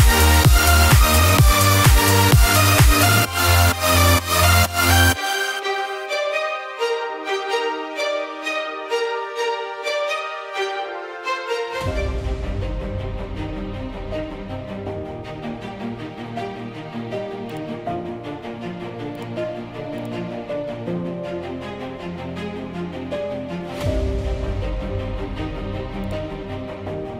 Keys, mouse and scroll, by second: 0.0 1, 0.6 click, 6.9 click, 7.0 1, 23.1 1, 26.2-27.1 drag.